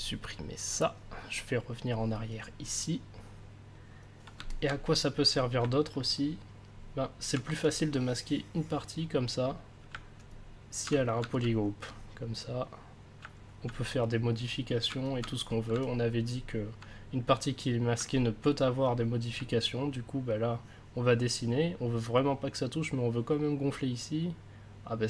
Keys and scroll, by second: 5.9 ctrl+s, 10.4 ctrl+s.